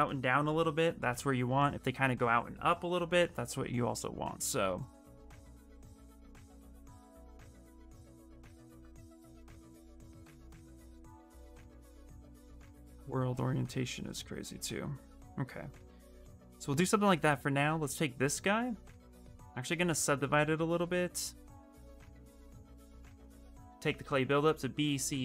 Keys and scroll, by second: 10.6 f, 10.9 f, 18.7 ctrl+d, 19.2 ctrl+d, 19.6 shift+f, 21.1 shift+f, 23.7 b, 24.5 c, 24.8 b.